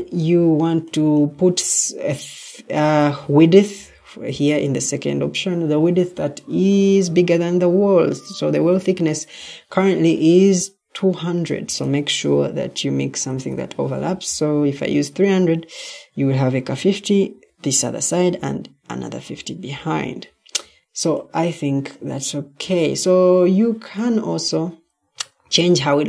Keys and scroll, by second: 13.2 typing.